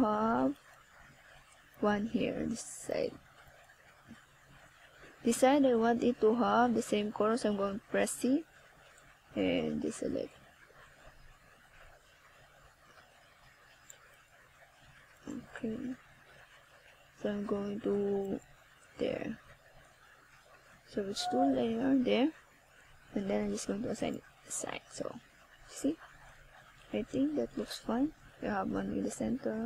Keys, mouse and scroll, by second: 0.0 click, 2.8-4.4 scroll down 6, 5.4 click, 7.9 click, 14.2-15.1 scroll down 2, 15.5 click, 16.9 click, 20.7-21.8 scroll up 4, 22.4 scroll up 1, 24.0 click, 27.8 click.